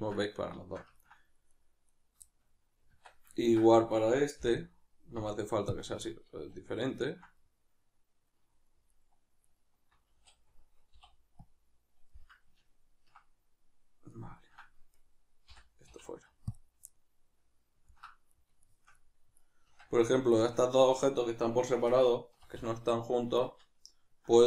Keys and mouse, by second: 1.5 right click, 2.3-3.9 shift+middle drag, 2.9 Tab, 3.9 right click, 6.1-8.9 middle drag, 6.4 a, 8.9 alt+right click, 9.5 alt+right click, 10.2 a, 12.1-14.9 middle drag, 14.9 right click, 15.5 l, 16.9-20.3 middle drag, 19.7 Tab, 20.3 shift+right click, 22.5 ctrl+j.